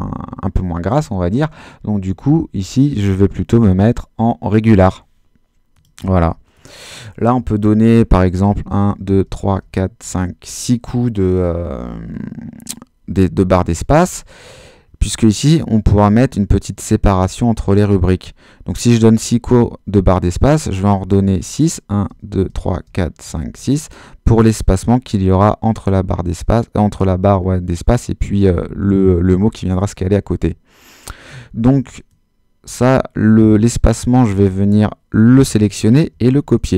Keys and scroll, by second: 8.5 space, 21.0 space, 36.4 super+c.